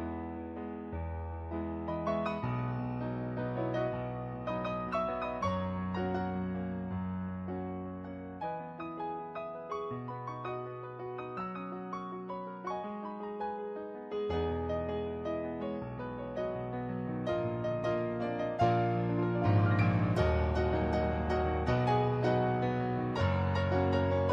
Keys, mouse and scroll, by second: 1.0 ctrl+z, 2.0 ctrl+z, 3.2 ctrl+z, 4.5 ctrl+z, 5.3 ctrl+z, 5.9 ctrl+z, 6.6 ctrl+z, 6.8 ctrl+z, 7.5 ctrl+z, 9.0 ctrl+z, 9.6 ctrl+z, 10.4 ctrl+z, 10.9 ctrl+z, 11.3 ctrl+z, 13.5 ctrl+z, 14.5 ctrl+z, 16.7 ctrl+z, 19.0 ctrl+z, 19.4 ctrl+z, 21.9 ctrl+z.